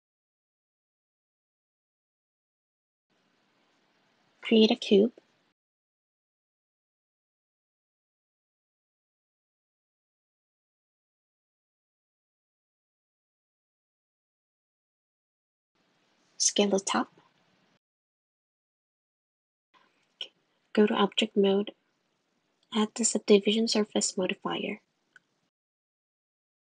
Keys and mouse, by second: 1.0 click, 2.2 click, 3.4 shift+a, 5.0 s, 8.5 g, 11.6 Tab, 14.5 Tab, 16.4 1, 16.6 click, 17.1 click, 18.4 g, 19.2 s, 20.0 Tab, 20.6 click, 20.7 click, 21.6 click, 22.1-23.7 drag, 23.8 click, 25.2 click, 25.4 click, 25.8 click.